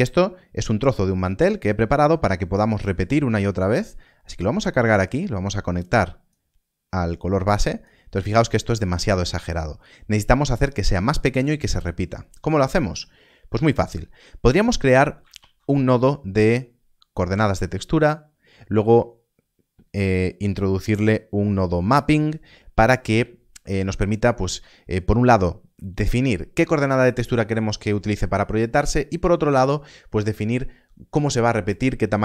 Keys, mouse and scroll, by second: 4.4 middle click, 6.5 click, 8.1-9.1 scroll down 1, 9.1 middle click, 11.9 middle click.